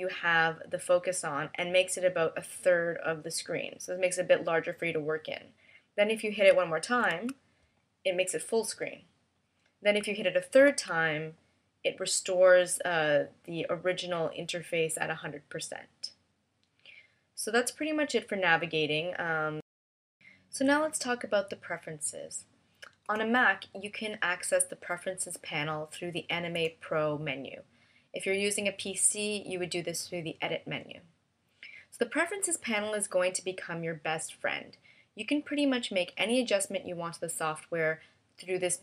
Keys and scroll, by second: 7.5 super+f, 11.1 super+f.